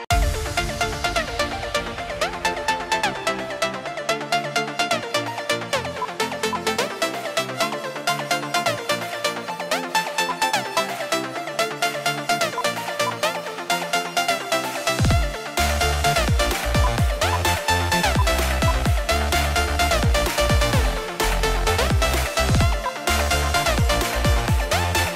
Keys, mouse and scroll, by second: 1.0 F2, 6.2 shift+click, 9.3 right click, 10.2 right click, 10.3 shift+click, 11.5 double click, 12.8 shift+click, 16.0 right click, 17.0 shift+click, 18.3 shift+click.